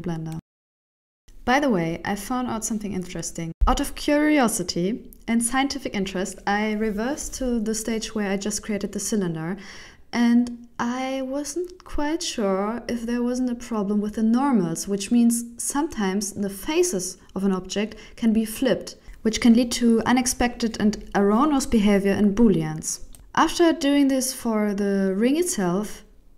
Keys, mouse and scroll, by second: 23.7 click, 23.7 shift+middle click, 23.7 n, 24.1 Tab, 24.4 middle click, 25.3 right click.